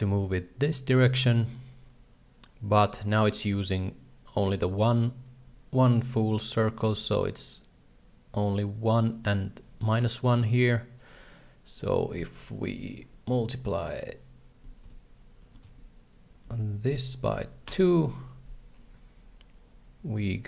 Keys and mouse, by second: 11.7-18.6 drag, 19.8-20.4 shift+drag.